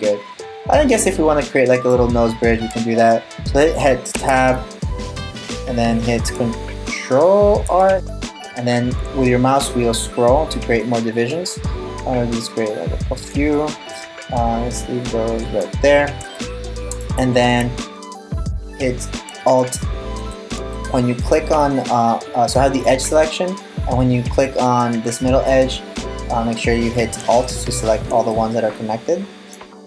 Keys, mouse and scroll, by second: 3.8 Tab, 7.5 ctrl+r, 16.0 middle click, 18.3 right click, 19.3 alt+r, 19.8 right click, 20.3 alt+right click, 20.8 alt+right click, 22.9-23.3 scroll down 2, 23.3-24.2 scroll up 7, 24.2 scroll up 2, 24.4-25.9 scroll down 3, 27.1 alt+right click, 27.9 middle click, 29.7 scroll down 1.